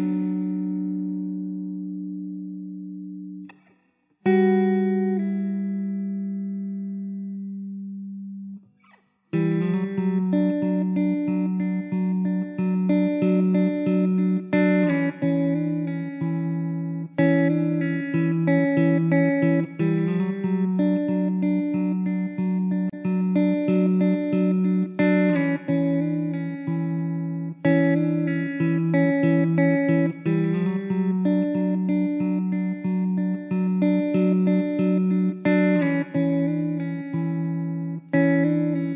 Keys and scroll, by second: 0.0 s, 0.0 ctrl+z, 0.1 ctrl+z, 0.7 ctrl+z, 6.0 KP_0, 13.4 Tab.